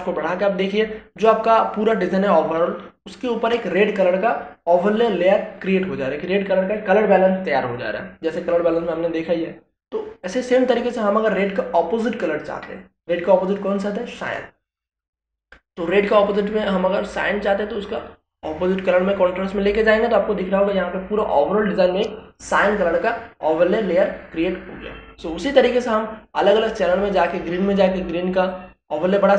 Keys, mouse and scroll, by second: 16.3-29.3 drag.